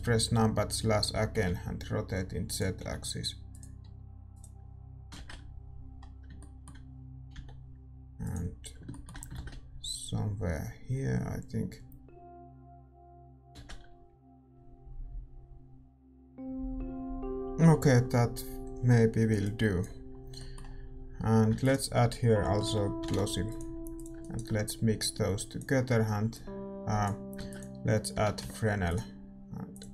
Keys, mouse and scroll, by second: 0.2-13.7 middle drag, 6.3 ctrl+z, 6.3 r, 8.8 g, 13.7 shift+z, 14.5 Tab, 14.5 ctrl+s, 14.5-29.9 middle drag.